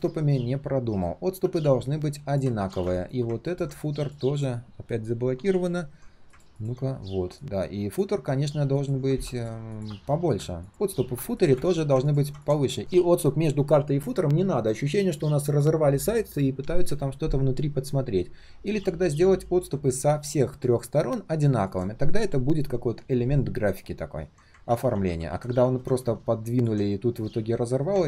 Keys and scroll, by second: 2.5 ctrl+z, 5.4 ctrl+alt+shift+l, 24.6 ctrl+z, 24.9 ctrl+z, 25.1 ctrl+z.